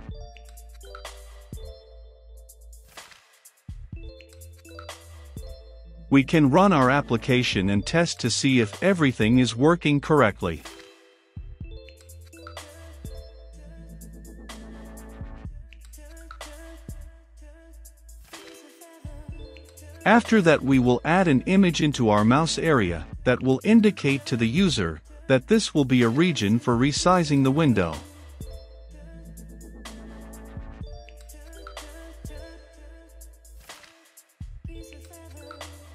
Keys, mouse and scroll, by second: 0.0-3.5 typing, 4.8-19.1 drag, 19.1 Return, 19.9-20.9 typing, 21.6-25.5 drag, 25.5 middle click, 25.5-26.1 scroll down 2, 26.1 scroll down 1, 26.2 click, 26.6-28.9 typing, 29.3 click, 29.8 Return, 30.3 click, 30.5-32.7 typing, 34.7-35.9 drag.